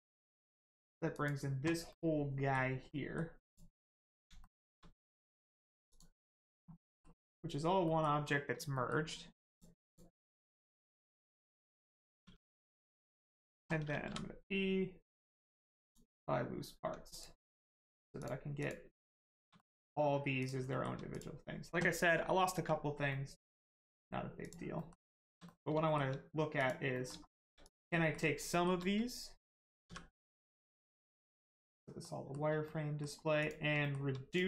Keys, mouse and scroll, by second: 0.0 click, 1.9 middle click, 3.4 click, 3.8 scroll up 1, 4.4 shift+middle click, 5.9 middle click, 6.8 middle click, 7.2-7.8 scroll up 1, 7.8 middle click, 8.2 scroll up 1, 8.7 middle click, 9.5 click, 10.3 middle click, 10.7 shift+middle click, 11.0 middle click, 12.2 Tab, 12.9 middle click, 14.0 p, 15.8 click, 16.7 Tab, 17.1 click, 17.5 middle click, 18.6 click, 19.1 shift+middle click, 19.5 middle click, 19.6 middle click, 19.9-20.4 scroll up 1, 20.4 click, 20.7 shift+middle click, 22.9 scroll up 1, 23.1 middle click, 23.6 shift+middle click, 24.4 click, 24.7 middle click, 25.1 shift+middle click, 25.5 middle click, 25.8 shift+middle click, 26.5 click, 26.6 click, 26.9 middle click, 27.3 shift+middle click, 27.6 middle click, 28.0 middle click, 28.5 shift+middle click, 31.2 click, 32.0 shift+middle click, 32.6 middle click, 32.7 middle click, 33.4 click, 33.8 shift+middle click, 34.3 click.